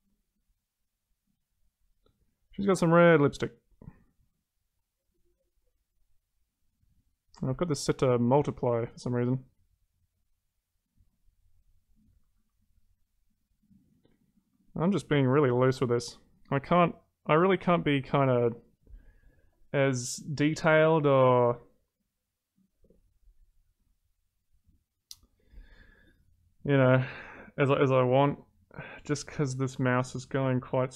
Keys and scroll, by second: 12.2 ctrl+z.